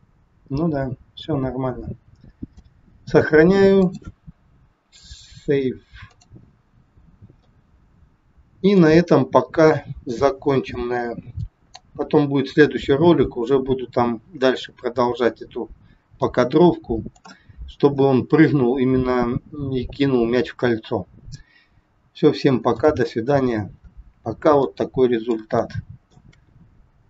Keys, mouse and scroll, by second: 3.7 click, 7.3 middle click, 11.6 scroll down 1, 16.1 scroll down 2, 16.2 middle click, 17.6 scroll down 2, 22.8 middle click, 23.2-23.8 scroll up 4, 23.8 scroll down 1, 24.6 middle click, 25.6 shift+middle click, 26.7 scroll down 3.